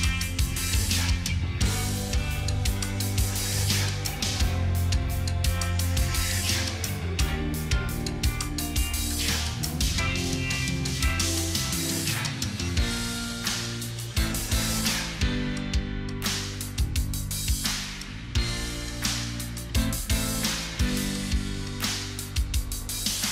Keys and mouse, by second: 0.8 double click, 1.0 double click, 1.2 double click, 2.0 double click, 4.8 double click, 8.3 double click, 9.1 double click, 9.3 double click, 9.6 double click, 9.9 double click, 10.1 double click, 10.3 double click, 10.6 double click, 13.2 double click, 13.5 double click, 13.8 double click, 14.0 double click, 14.3 double click, 14.7 double click, 14.9 double click, 15.2 double click, 15.6 double click, 15.9 double click, 16.1 double click, 16.3 double click, 16.7 double click, 17.2 double click, 17.4 double click, 17.6 double click, 17.9 double click, 18.2 double click.